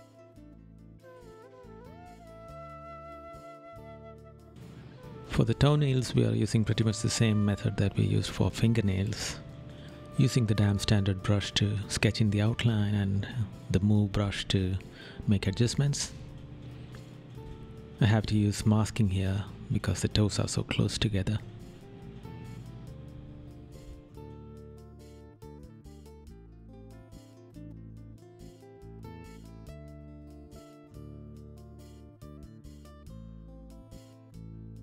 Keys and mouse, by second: 0.4 right click, 0.9 right click, 2.0 right click, 3.0 right click, 4.2 right click, 4.6 right click, 5.6 right click, 6.4 right click, 9.3 right click, 11.1 right click, 13.3 right click, 14.9 right click, 15.5 right click, 16.2 right click, 16.9 right click, 17.8 right click, 19.0 right click, 20.8 right click, 21.7 right click, 23.2 right click, 23.9 right click, 24.4 right click, 28.6 right click, 29.8 right click, 31.5 right click, 33.1 right click, 34.7 right click.